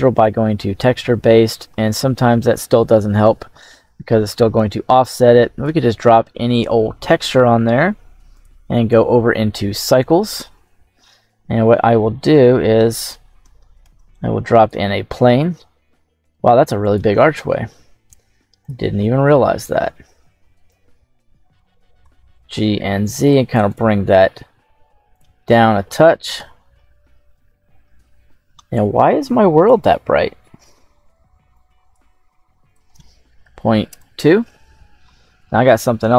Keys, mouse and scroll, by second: 4.5 click, 8.5 click, 13.3 click, 13.7 shift+a, 15.7 s, 16.7 click, 17.6 s, 18.5 click, 19.2-19.9 middle drag, 20.2-21.5 scroll down 7, 21.9 g, 22.3 z, 23.5 click, 24.2 s, 25.0 click, 25.3-25.8 middle drag, 26.2 KP_7, 26.6-28.0 scroll up 8, 29.5 click, 31.4 click, 32.5-33.8 drag.